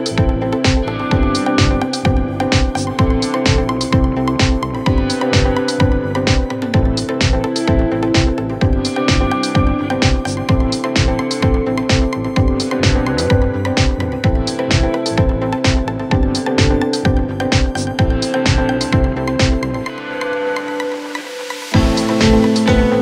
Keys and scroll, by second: 5.7 Escape, 21.2 c, 21.4 Escape, 21.6 F3, 21.8 Escape, 22.2 shift+F2, 22.2 Escape.